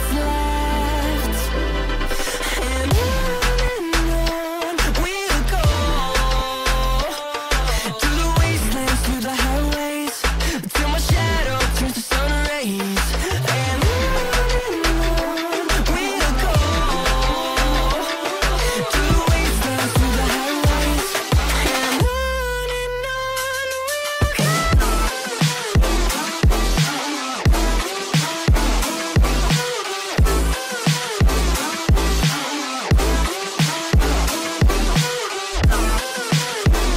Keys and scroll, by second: 7.8 space, 9.3 Delete, 14.9 space, 15.3 F2, 18.5 shift+F2, 18.9 Escape, 22.6 F3, 26.1 ctrl+q, 27.4 ctrl+q.